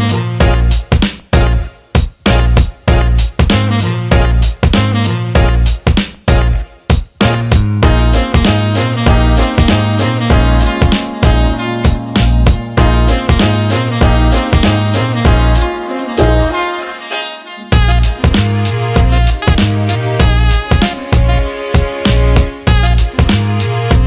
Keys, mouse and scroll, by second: 0.8 click, 1.8 click, 3.2-3.7 drag, 3.8 alt+shift+middle drag, 4.2 alt+middle click, 4.8 middle click, 5.1 alt+shift+middle click, 6.0 ctrl+s, 6.4 click, 9.4 click, 10.8-12.4 drag, 14.4 click, 15.4 click.